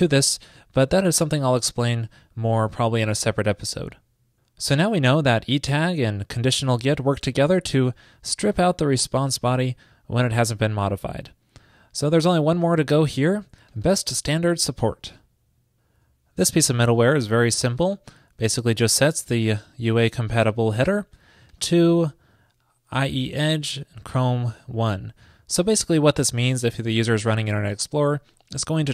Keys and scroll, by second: 8.1 super+v.